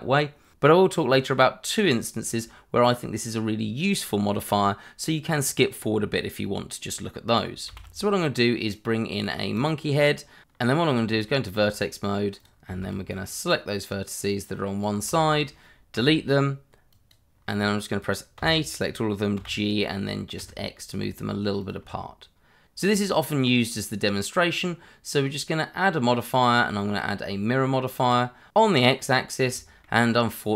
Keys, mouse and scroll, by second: 7.6 shift+a, 9.2 click, 10.0 middle click, 10.5 scroll up 1, 10.9 Tab, 12.4 click, 12.7 shift+z, 13.1 click, 15.0 shift+z, 15.9 Delete, 16.9 click, 17.6 scroll up 1, 18.3 a, 19.3 g, 20.4 x, 21.6 click, 21.8 Tab, 22.9 scroll down 1, 23.1 scroll up 1, 23.2 shift+middle click, 23.8 shift+middle click, 24.6-25.8 scroll up 1, 26.4 click, 28.8 scroll up 1, 29.5 shift+middle click.